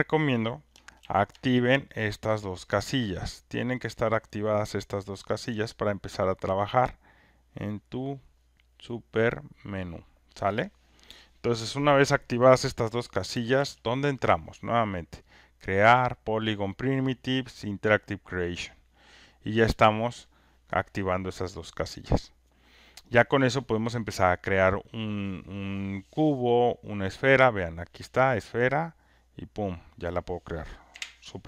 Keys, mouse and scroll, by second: 1.0 ctrl+F1, 2.1 click, 5.4 ctrl+click, 9.2 click, 13.5 ctrl+F1, 15.4-20.7 drag, 22.2-27.4 drag, 29.9 click, 30.9 Delete.